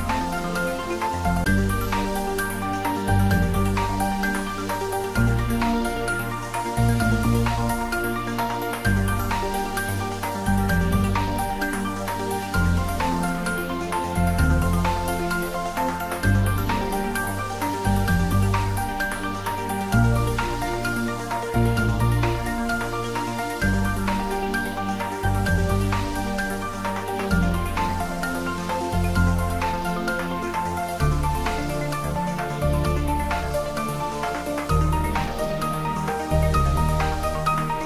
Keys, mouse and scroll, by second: 4.6-6.0 scroll up 1, 8.2-10.0 scroll down 1, 10.3-12.8 middle drag, 12.8-13.1 scroll up 1, 13.9-14.8 scroll down 1, 14.8-15.5 scroll up 1, 15.5-18.4 middle drag, 18.4 scroll down 1, 19.2-19.7 scroll up 1, 19.7-23.9 middle drag, 25.6 click, 26.9 alt+shift+click, 32.4 scroll up 1, 33.9 `, 34.4 3, 37.5 click.